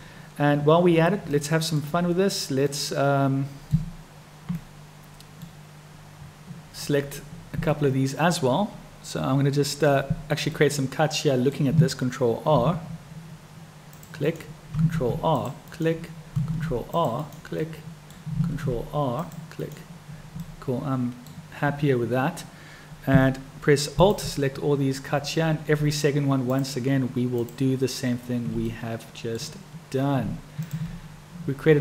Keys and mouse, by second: 1.4 middle click, 2.7-3.8 middle drag, 4.6 middle click, 10.6 click, 12.6 ctrl+r, 14.9 ctrl+r, 17.6 click, 18.7 ctrl+r, 20.5 click, 24.0 alt+click, 26.4 shift+click, 27.3 shift+click, 28.7 click.